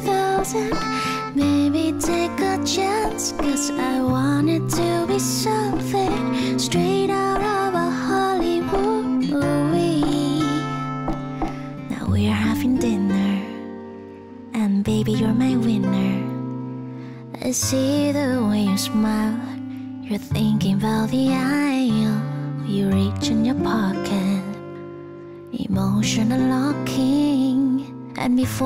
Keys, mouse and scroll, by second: 11.5 ctrl+alt+shift+y, 11.7 ctrl+alt+shift+y, 19.3-20.5 typing, 23.7-24.5 typing.